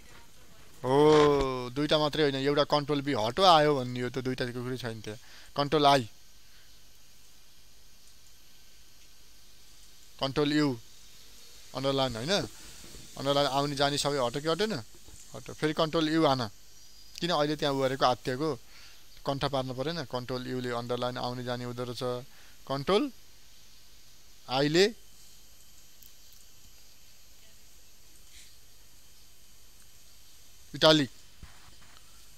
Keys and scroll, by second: 5.7 ctrl+l, 9.1 ctrl+i, 11.1 ctrl+u, 20.5 ctrl+u.